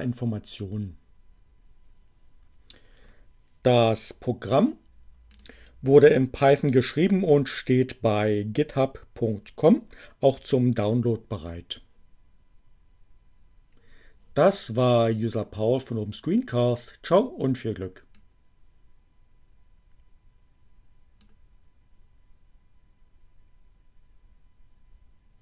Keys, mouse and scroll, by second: 5.4 click, 16.7-21.5 drag.